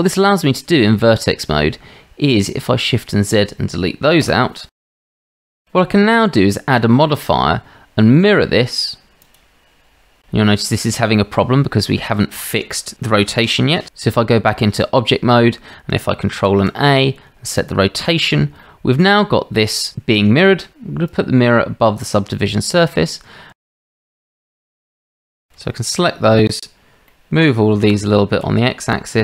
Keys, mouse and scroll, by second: 0.9 shift+z, 2.5-3.3 drag, 5.0 Delete, 5.0 Tab, 5.2 shift+z, 9.3-9.9 drag, 14.0 Tab, 16.3 ctrl+a, 18.6-18.9 shift+drag, 21.1-22.4 drag, 23.5 Tab, 24.0 shift+click, 24.6 shift+z, 25.1 click, 25.6 shift+z, 27.8 g.